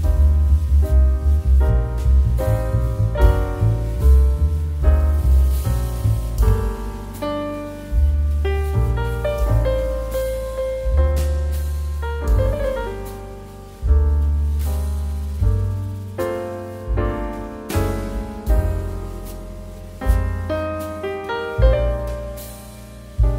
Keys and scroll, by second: 2.8 Escape, 3.3 x, 7.4 KP_1, 7.4 KP_0, 10.1 KP_1, 10.1 KP_0, 10.3 Return, 11.3 g, 18.7 z.